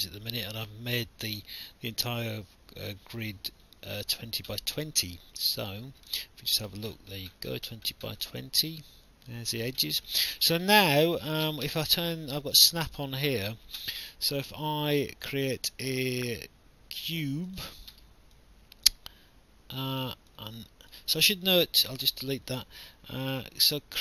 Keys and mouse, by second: 5.3 click, 6.2 alt+click, 6.9 middle click, 8.2 alt+click, 15.2 click, 17.5 click, 20.3 click, 22.0 Delete, 22.0 KP_Decimal, 23.6 click.